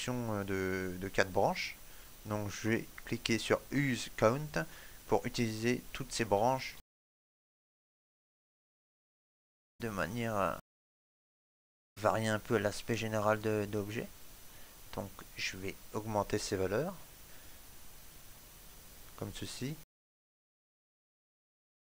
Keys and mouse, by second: 6.3 shift+middle click, 6.8 ctrl+middle click, 9.2 click, 16.8 click, 20.7 middle click, 21.7 ctrl+middle click.